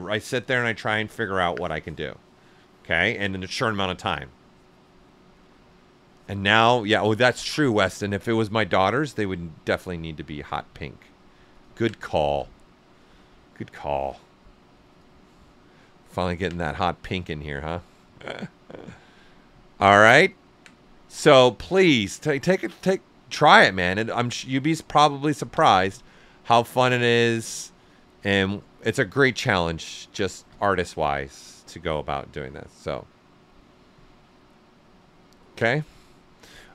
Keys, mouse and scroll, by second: 9.6 click, 11.4 alt+click, 17.7 click, 27.1 click, 31.4 click.